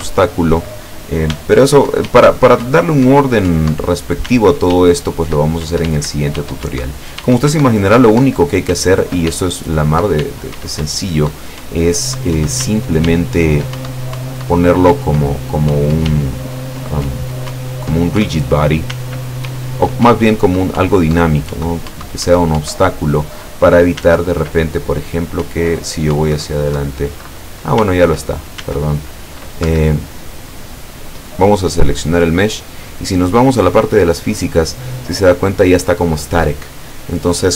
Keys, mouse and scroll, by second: 1.3 s, 1.9 Up, 2.1 w, 2.7 Up, 4.3 s, 4.8 w, 5.7 Up, 6.0 w, 6.7 Up, 7.3 w, 7.6 Up, 9.4 w, 10.9 Up, 12.7 s, 13.1 w, 13.8 Up, 16.1 w, 17.6 Up, 18.9 s, 19.5 w, 20.1 Up, 24.1 s, 25.5 Up, 26.8 Down, 27.9 s, 29.7 Escape, 30.6 right click, 33.8 click.